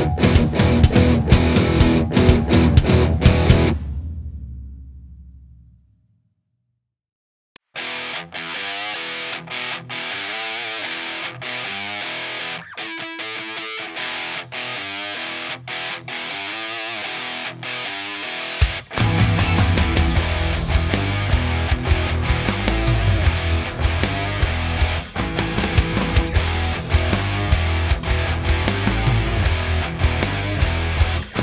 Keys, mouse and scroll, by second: 1.2 Escape, 1.5 r, 3.3 z, 3.9 click, 5.0 s, 5.9 click, 6.5 s, 7.7 click, 8.3 s, 9.3 click, 9.4-11.7 middle drag, 10.1-11.3 scroll down 4, 11.3 Tab, 11.7 click, 12.4 i, 13.2 click, 13.8 click, 14.2 Delete, 14.9 ctrl+z, 15.1 click, 15.5 click, 15.7 click, 15.8 click, 16.1 Delete, 16.7 click, 17.5 click, 17.8 Delete, 18.3-19.3 middle drag, 19.0-19.3 scroll up 1, 19.3 click, 20.0 alt+e, 21.1 s, 22.7 click, 22.9 alt+e, 24.4 click, 24.5-25.9 scroll down 1, 26.9 click, 27.1 s, 27.9 click, 28.1 middle click, 28.8 click, 29.4-30.7 drag, 31.0 click.